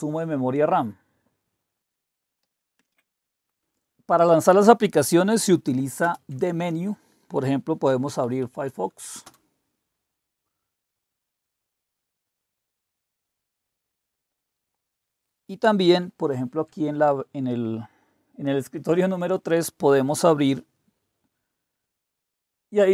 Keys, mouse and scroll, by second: 2.8 super+2, 6.0 super+space, 7.6-8.9 typing, 9.2 Return, 16.3 super+3.